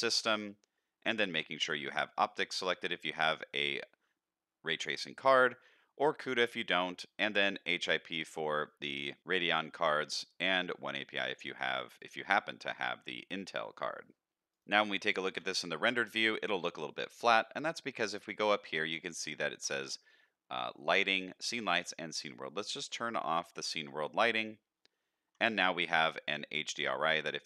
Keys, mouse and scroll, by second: 14.7 z, 16.4 middle click, 18.2-24.2 drag, 25.4-25.9 middle drag, 26.2 middle click, 27.0-27.4 drag.